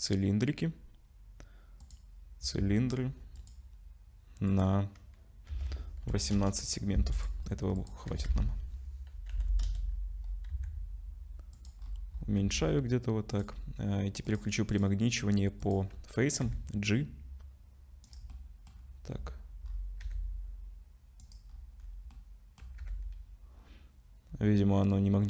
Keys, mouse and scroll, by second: 3.5 click, 4.5 click, 7.4-7.8 scroll down 5, 7.8 click, 8.1 r, 10.5 s, 11.8-12.4 scroll up 7, 12.4 s, 14.3 click, 14.7 click, 16.4 g, 18.3 middle click, 18.7-19.3 scroll down 4, 19.7-20.0 scroll up 4, 20.0 g, 21.5 scroll up 2, 21.8 scroll down 1, 21.8 scroll down 2, 22.1 middle click, 22.8 g.